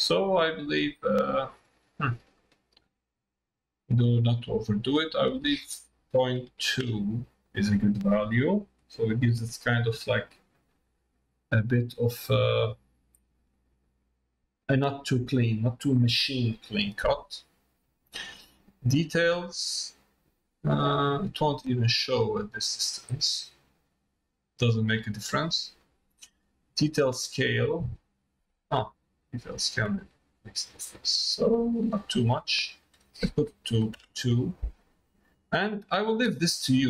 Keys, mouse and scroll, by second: 2.3 middle click, 5.1-7.8 drag, 8.4 middle click, 9.4 middle click, 10.6 middle click, 11.1 middle click, 12.0 middle click, 12.6 middle click, 13.6 middle click, 14.3 middle click, 15.1 middle click, 15.6 middle click, 18.9-21.1 drag, 23.0-25.0 drag, 26.6-32.5 drag, 32.6-34.7 drag, 35.7-36.8 drag.